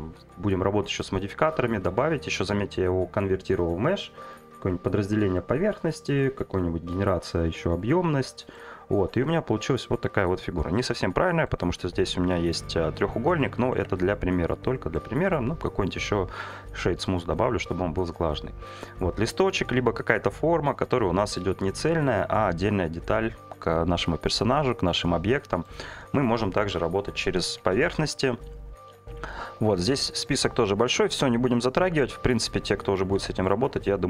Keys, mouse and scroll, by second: 0.2 click, 1.2-4.4 drag, 5.3 click, 6.2-7.8 drag, 9.1 Tab, 12.0 3, 13.8 Tab, 15.2 right click, 26.7 Delete, 27.6 shift+a, 33.6 Tab.